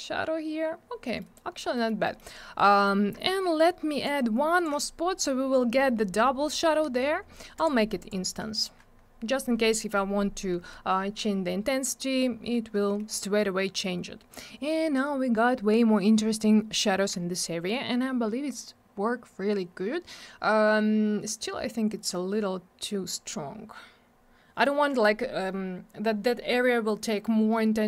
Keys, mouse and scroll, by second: 1.1 middle click, 1.3 middle click, 1.5 scroll down 1, 1.7 middle click, 1.8 middle click, 2.0 middle click, 2.1 double middle click, 2.7 middle click, 2.8 middle click, 4.0 shift+click, 7.5 click, 7.6 click, 8.0 click, 8.0 double click, 8.5 click, 8.6 click, 23.1 scroll down 1, 24.6 click.